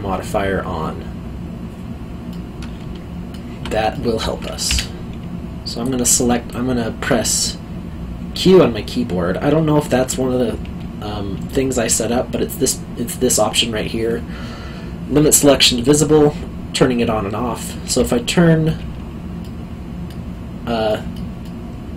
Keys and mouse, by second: 2.3 middle click, 3.9 alt+middle click, 4.6 3, 5.8 click, 8.3 o, 17.8 o, 19.4 middle click, 21.4 alt+middle click.